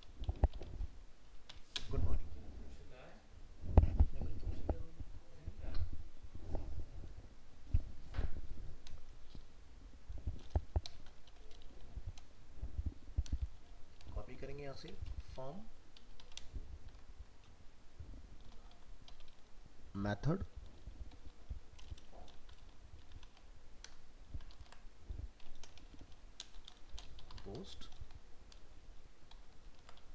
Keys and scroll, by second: 15.2 ctrl+c, 16.9 ctrl+v, 24.5 ctrl+z, 28.8 ctrl+shift+Left, 29.8 ctrl+c.